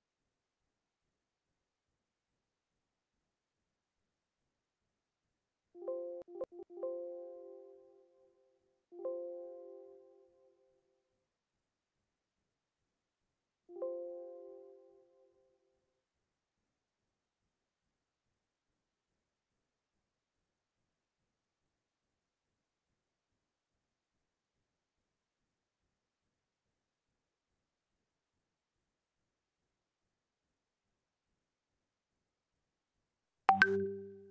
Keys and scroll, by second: 2.2 ctrl+v, 2.5 ctrl+space, 4.4 Delete, 4.6 End, 9.5 ctrl+space, 10.9 Down, 15.2 ctrl+space, 16.0 ctrl+space, 17.1 ctrl+space, 20.1 ctrl+space, 22.7 ctrl+space, 25.6 ctrl+space, 27.8 space, 28.6 ctrl+space.